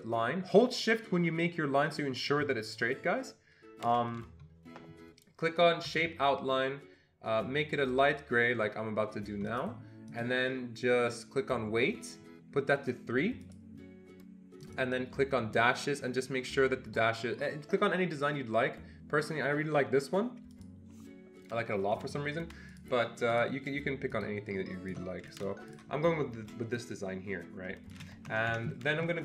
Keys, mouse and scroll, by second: 9.5 shift+click, 13.4 click, 14.6 click, 20.5 click, 22.7 click, 23.3 click, 24.4 shift+click, 25.7-26.8 shift+drag, 27.1 shift+click, 28.3 Escape, 28.5 Escape.